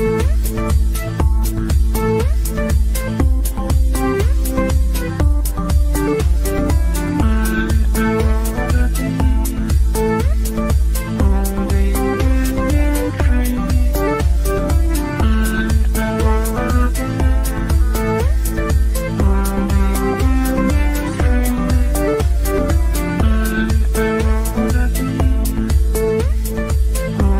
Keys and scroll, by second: 4.0 g.